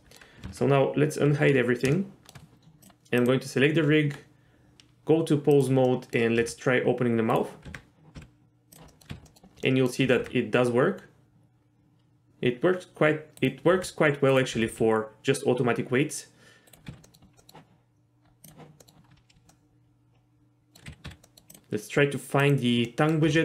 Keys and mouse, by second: 1.3 alt+h, 1.9-2.3 shift+middle drag, 2.8 click, 3.9 Tab, 5.8-6.1 middle drag, 6.4 r, 7.3 right click, 7.6-10.2 typing, 8.9 middle click, 9.3 middle click, 9.6 middle click, 13.4-13.7 right drag, 13.7 r, 14.5 r, 14.7 r, 16.7 right click, 16.9 z, 17.0 middle click, 17.4 middle click, 18.4 click, 18.8 middle drag, 19.5-20.7 middle drag, 20.9 a, 21.0 z, 21.2 middle click, 21.5 click, 22.4 click, 22.9 middle click, 23.2 g.